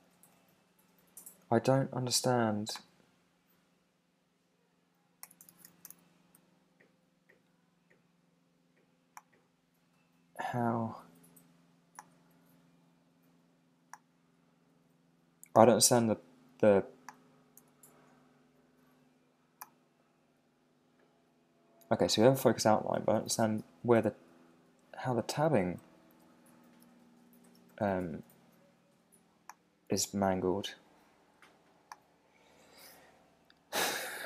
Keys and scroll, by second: 5.2 Return, 17.6 Tab, 23.3 Tab, 27.5 Tab.